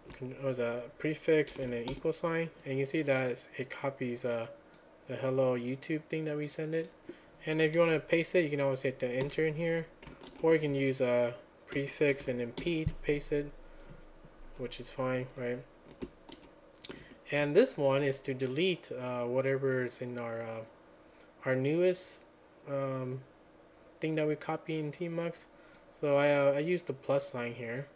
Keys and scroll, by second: 2.0 ctrl+a, 2.0 =, 10.3 Return, 10.3 ctrl+c, 12.2 ctrl+a, 12.7 p, 17.3 ctrl+c.